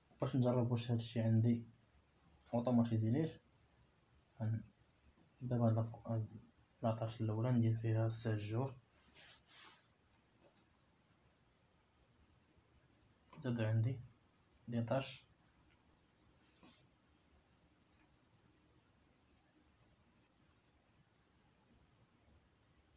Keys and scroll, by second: 8.7 7, 10.3 BackSpace, 10.8 shift+7, 11.5 Return.